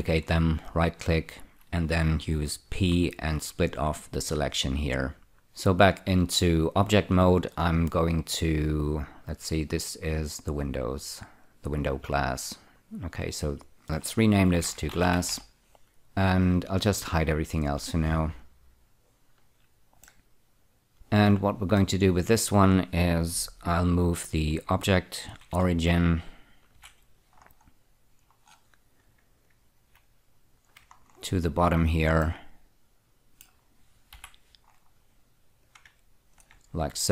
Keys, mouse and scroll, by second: 0.7 right click, 3.2 p, 4.4 click, 5.4 Tab, 10.3 click, 11.0 click, 11.7 click, 12.4 click, 13.6 click, 13.8 double click, 14.9-15.5 typing, 15.6 Return, 18.7 click, 19.0 click, 20.4 middle click, 22.1 middle click, 25.7 ctrl+<, 27.1 F2, 27.7-29.6 scroll up 2, 29.7 click, 31.3-32.5 scroll down 4, 32.5 middle click, 34.5 F4, 35.0-35.8 scroll up 3, 35.9 click.